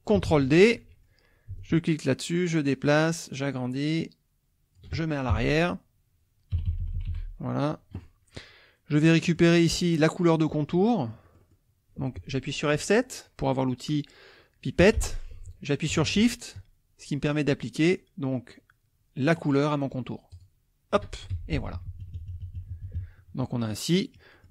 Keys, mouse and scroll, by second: 0.3 ctrl+d, 0.7 ctrl+click, 1.6 ctrl+shift+click, 2.5-4.9 drag, 5.3 Page_Down, 6.6 Page_Down, 8.9-10.0 middle drag, 10.8 middle click, 14.8 F7, 20.3 shift+click, 21.3 shift+F1, 21.6 shift+KP_Subtract, 22.2 shift+KP_Subtract, 22.8 shift+KP_Subtract, 23.6 click, 24.0 middle click.